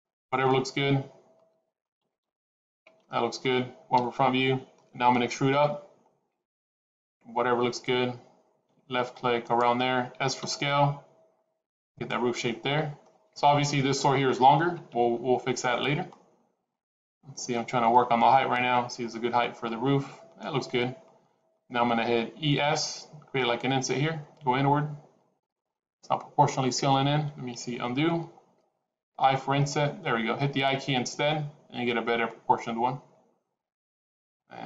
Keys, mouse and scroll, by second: 0.3 middle click, 2.9 middle click, 3.8 KP_1, 5.4 e, 10.3 s, 12.2 middle click, 14.8 middle click, 15.5 middle click, 19.0 middle click, 22.2 e, 25.6 middle click, 27.4 ctrl+z, 29.0 i.